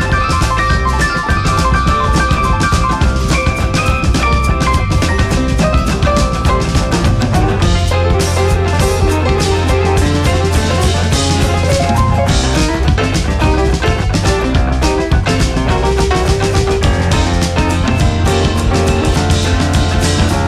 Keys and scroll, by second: 1.6 space.